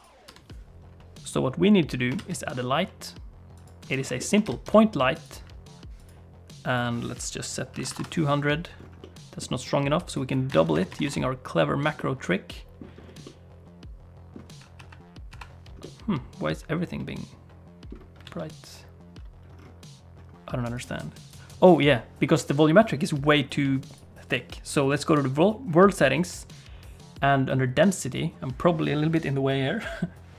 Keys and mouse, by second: 0.2 n, 2.1 shift+a, 4.2 shift+click, 4.4 g, 6.0-8.5 drag, 7.9 0, 9.0 middle click, 10.5-11.7 drag, 11.9 middle click, 13.2-14.3 middle drag, 14.7 KP_5, 15.3 KP_5, 15.8-17.9 middle drag, 18.2 alt+a, 21.3 click.